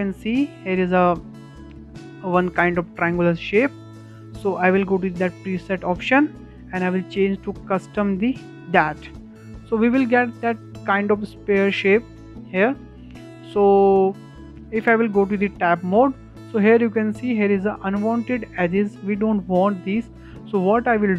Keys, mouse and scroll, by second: 6.3-9.3 drag, 9.5-9.9 shift+middle drag, 9.9 scroll up 1, 10.2-16.0 shift+middle drag, 16.0 Tab.